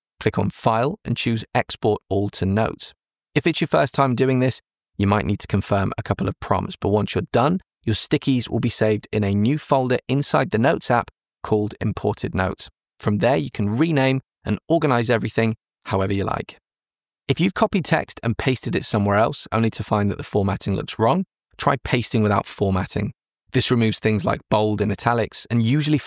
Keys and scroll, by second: 20.4 super+c, 22.5 super+v.